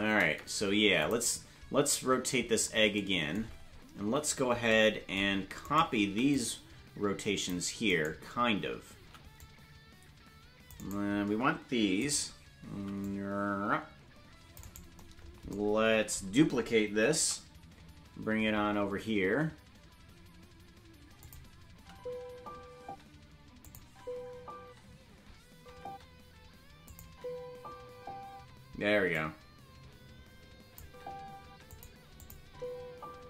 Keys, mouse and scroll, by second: 0.0 space, 1.0 click, 5.6 right click, 6.0 c, 9.8 c, 12.7 right click, 12.7 c, 17.1 shift+d, 21.7 space, 23.6 click, 23.8 space, 26.8 click, 26.8 space, 27.0 space, 28.6 space, 29.2-31.2 drag, 30.8 space, 31.7 click, 31.7 space, 32.2 click, 32.4 space.